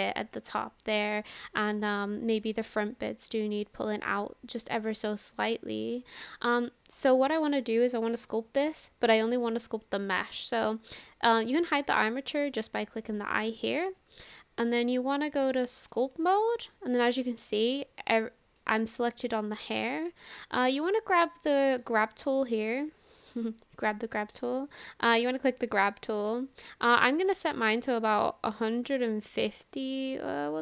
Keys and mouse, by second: 0.8-1.3 middle drag, 2.3-2.8 middle drag, 4.1-6.3 middle drag, 7.1 shift+middle click, 7.4 middle click, 8.0 click, 10.6 click, 13.1 click, 15.3 click, 16.7-18.6 middle drag, 21.7 click, 24.3 click, 27.0-30.6 drag.